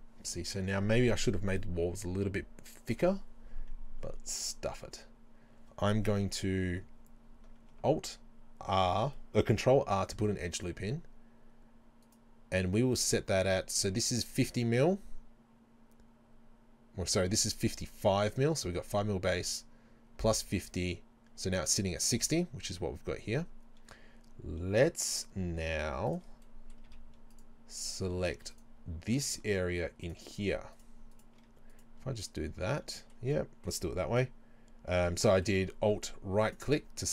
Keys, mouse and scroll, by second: 4.4 click, 6.3 KP_3, 6.8 KP_1, 8.8 ctrl+r, 12.2 right click, 26.1 click, 26.5-30.1 middle drag, 26.9 z, 28.1 z, 30.1 right click, 31.2 shift+right click, 32.3-36.5 middle drag, 36.5 alt+right click.